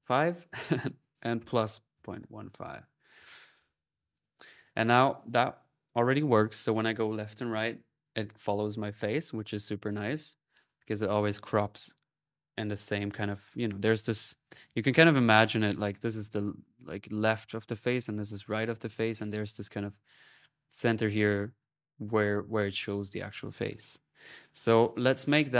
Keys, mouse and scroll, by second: 4.7 click, 7.8 middle click, 25.5 click.